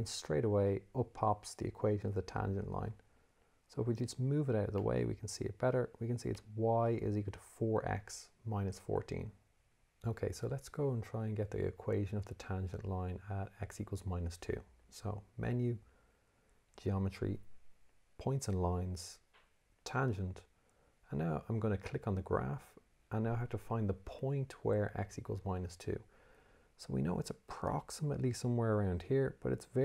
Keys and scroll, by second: 3.4 Escape, 9.5 Escape, 14.9 Menu, 16.2 8, 18.1 1, 19.8 8.